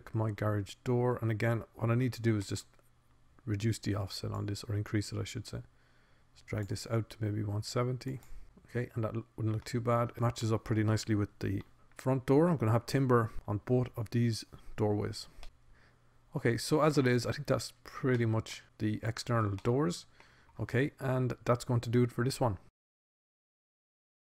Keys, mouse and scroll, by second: 0.3 right click, 0.5 middle click, 1.4 click, 1.7 middle click, 2.1 middle click, 2.3 middle click, 6.1-7.7 drag, 7.7-9.5 middle drag, 10.5 middle click, 11.1 middle click, 15.7-17.0 middle drag.